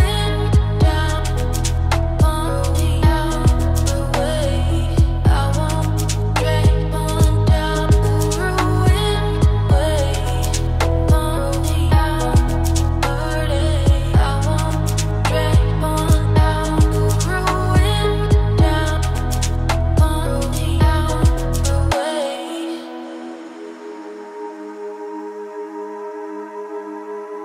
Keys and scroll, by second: 16.3 shift+a, 19.3 g, 20.2 s, 22.2 g, 25.2 z.